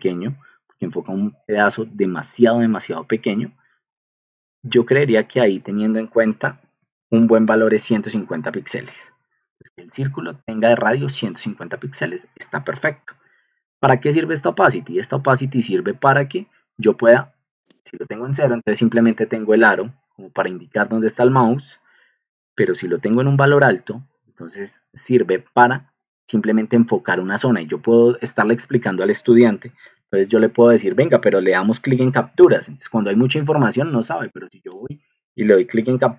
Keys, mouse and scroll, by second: 6.2-7.9 typing, 6.4 Delete, 29.7 ctrl+alt+m, 32.4 ctrl+alt+m, 33.5 ctrl+alt+m, 35.8 ctrl+alt+m.